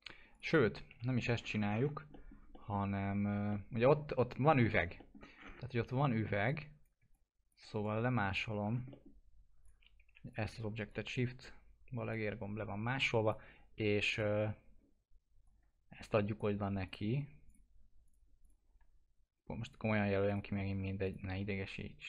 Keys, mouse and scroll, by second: 0.9 Delete, 1.3-2.1 scroll down 1, 2.1 middle click, 3.5 alt+middle click, 5.3-6.4 scroll up 1, 6.4 click, 7.1 shift+click, 8.6 scroll down 1, 8.9 middle click, 9.6 click, 10.1 Delete, 10.2 click, 10.8-16.9 shift+drag.